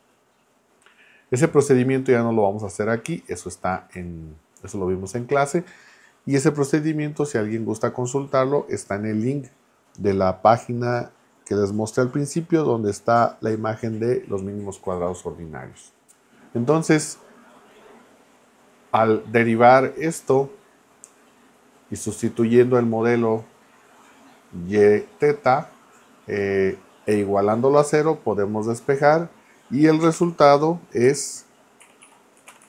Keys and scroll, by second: 30.1-32.6 typing.